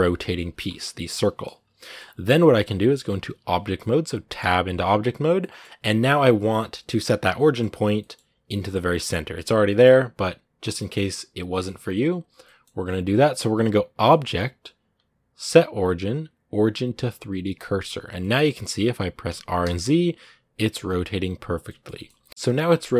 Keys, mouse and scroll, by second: 0.4 scroll up 2, 0.9-4.2 middle drag, 4.2 Tab, 5.1 scroll down 1, 5.2-9.6 middle drag, 9.6-10.4 scroll up 1, 10.4 scroll down 2, 10.6-17.4 middle drag, 18.0 middle click, 18.2-19.1 scroll down 1, 19.1 r, 21.4 shift+middle click, 22.3-22.9 scroll down 2.